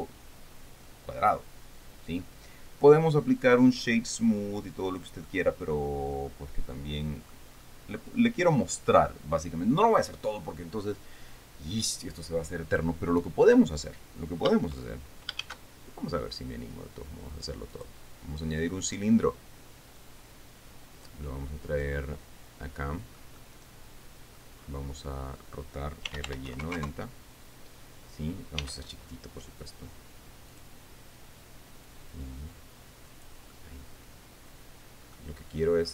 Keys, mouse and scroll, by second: 5.2-5.5 scroll down 2, 5.8-8.0 drag, 8.6-9.0 scroll down 2, 9.6-10.0 scroll down 2, 15.5 shift+scroll down 2, 16.0 shift+a, 18.3 click, 19.2 scroll down 2, 20.6-23.9 drag, 21.8-23.9 middle drag, 24.0-25.1 middle drag, 25.2-25.8 scroll up 2, 26.3-27.3 typing, 27.3 KP_Enter, 29.1 s, 31.1 click, 32.4-34.0 drag, 34.1-35.9 middle drag.